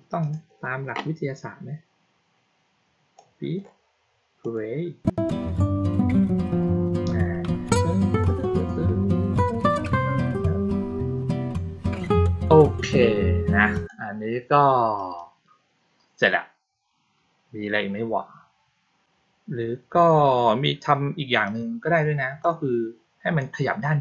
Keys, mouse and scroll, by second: 0.1 click, 3.1-3.5 drag, 4.3 click, 13.7 click, 14.9 click, 21.4-22.3 drag.